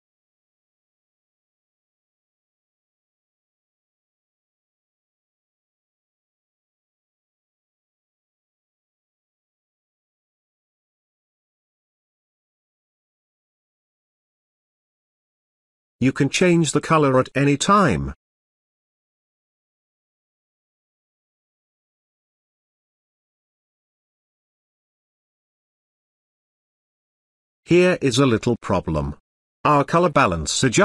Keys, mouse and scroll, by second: 4.3 space, 4.4-4.9 ctrl+click, 5.0 space, 5.1 ctrl+click, 5.3 ctrl+z, 5.6-6.9 drag, 10.4 space, 10.4-11.7 ctrl+click, 11.4-13.5 ctrl+drag, 15.0 space, 15.1-15.9 ctrl+drag, 15.7 click, 26.5 click, 27.8 space, 28.0-29.9 ctrl+drag, 28.7 ctrl+click.